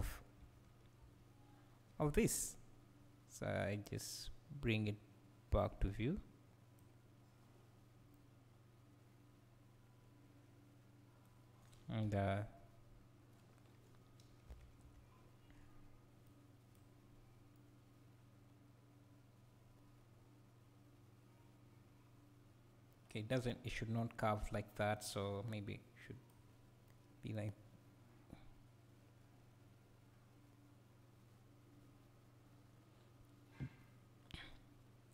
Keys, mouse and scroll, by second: 0.0 Down, 1.0 Up, 4.0-8.1 drag, 8.1-16.2 right drag, 12.0 KP_7, 12.2 KP_7, 13.0 scroll down 1, 14.5 Down, 14.8 Up, 16.2-16.8 drag, 17.5-24.9 right drag, 24.9-26.9 drag, 26.9-35.1 right drag.